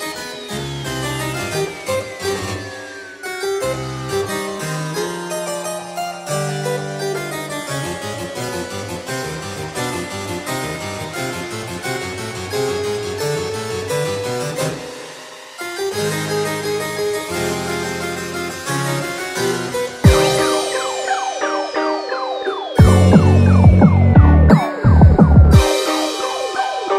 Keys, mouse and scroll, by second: 0.3 click, 2.7 click, 6.9 click, 9.4 KP_Enter, 11.7 KP_Enter, 12.4 KP_0, 13.5 KP_Enter, 15.3 KP_Enter, 18.9 click, 20.6 middle click, 21.1 scroll down 3, 21.4 shift+middle click, 21.8 middle click, 22.7 shift+middle click, 23.0 scroll up 5, 23.4 middle click, 24.0 scroll down 5, 24.2 middle click, 26.2 scroll up 2, 26.6 shift+middle click.